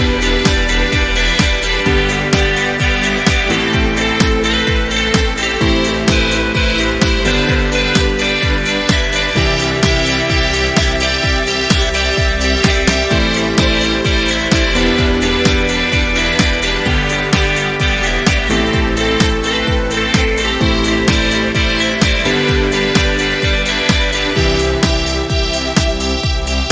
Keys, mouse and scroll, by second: 1.9 ctrl+scroll up 1, 2.7 click, 2.8-3.7 drag, 10.2 ctrl+scroll down 1, 10.7-11.0 ctrl+scroll up 1, 12.0-12.9 drag, 17.6-18.2 drag, 26.5 ctrl+scroll up 1.